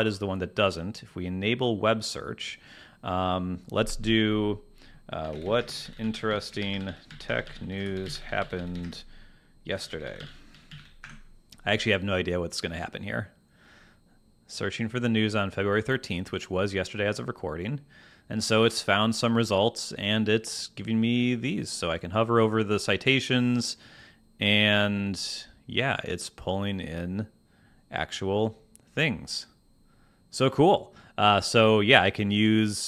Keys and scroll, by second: 5.4 t, 5.6 space, 6.6 g, 10.7 y, 11.0 Return.